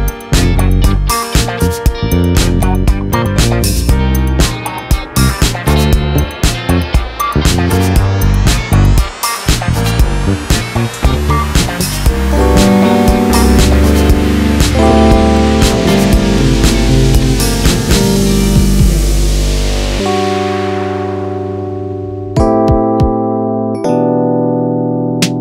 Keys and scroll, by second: 1.2 Return, 3.2 ctrl+a, 5.1 Return, 5.5-8.9 typing, 10.7-14.5 typing, 20.3 ctrl+a, 21.9 Down, 22.1 Down, 22.7 Down, 23.3 Down.